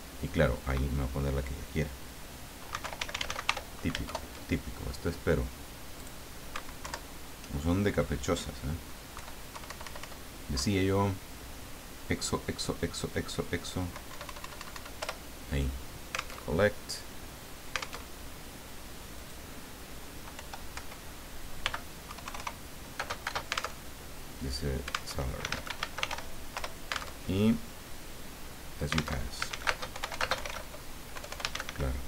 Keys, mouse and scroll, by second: 2.5-4.0 typing, 6.0 click, 6.8 alt+Down, 9.1 Page_Down, 9.5 Page_Up, 10.5 Down, 14.1 Up, 15.1 Return, 16.4 alt+Tab, 18.0 alt+Tab, 19.1 click, 20.3 End, 20.9 Return, 21.6 m, 22.0 KP_2, 22.2 KP_0, 23.2 space, 23.8 alt+Tab, 25.2 alt+Tab, 25.5 alt+a, 25.6 alt+l, 25.8 alt+a, 26.0 alt+r, 26.1 alt+y, 26.5 alt+Return, 27.1 alt+Tab, 29.2 alt+Tab, 29.4 alt+a, 29.5 alt+s, 29.9 alt+y, 30.0 alt+o, 30.1 alt+u, 30.2 alt+space, 30.5 alt+d, 31.1-32.0 typing.